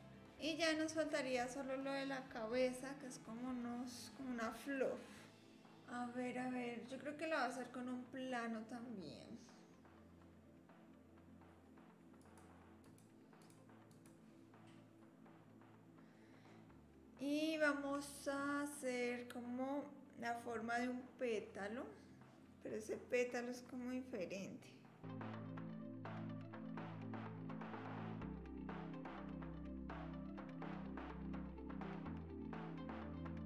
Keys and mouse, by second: 0.1-1.4 middle drag, 12.2 click, 12.8 click, 13.4 click, 13.9 click, 14.6 KP_1, 14.6 KP_7, 25.1 2, 25.3 s, 26.3 s, 27.8 ctrl+r, 29.8 click, 31.3 click, 32.7 click, 33.1 middle click.